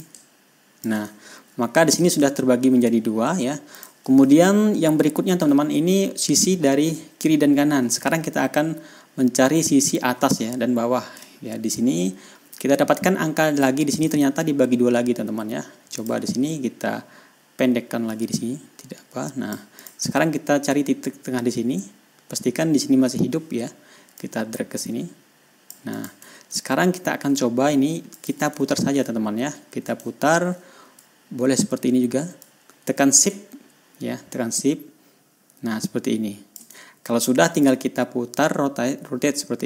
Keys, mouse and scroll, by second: 0.5-1.5 ctrl+drag, 1.5-3.0 ctrl+shift+scroll down 5, 3.0 ctrl+scroll up 2, 4.2 click, 4.8 ctrl+scroll down 2, 5.3 ctrl+scroll up 2, 8.5 ctrl+scroll down 2, 9.1-9.6 ctrl+scroll down 4, 9.9-10.6 ctrl+scroll up 4, 11.7-12.2 ctrl+scroll down 2, 12.3 ctrl+scroll down 2, 12.9-13.2 ctrl+scroll up 2, 13.6 ctrl+scroll down 2, 14.0 ctrl+scroll up 2, 16.4 click, 18.6-20.1 drag, 20.2 click, 24.6-26.3 drag, 26.4 click, 26.7 ctrl+scroll down 2, 28.6 click, 29.1 ctrl+scroll up 2, 30.7 ctrl+scroll down 2, 32.9-37.2 drag, 37.2 ctrl+shift+scroll down 2, 37.7 ctrl+scroll up 2.